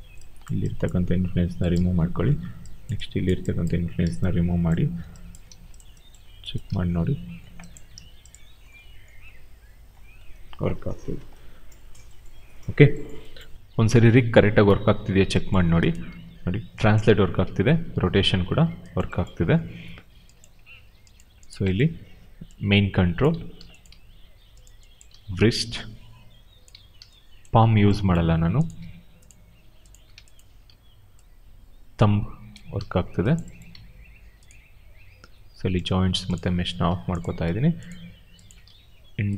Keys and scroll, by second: 5.4 w, 6.6 e, 7.9 ctrl+z, 10.5 ctrl+z, 15.9 w, 16.9 ctrl+z, 17.3 e, 18.1 ctrl+z, 23.2 ctrl+z, 23.7 q, 24.9 e, 26.6 ctrl+z, 28.1 q, 30.6 e, 32.4 ctrl+z, 33.6 q, 38.5 e.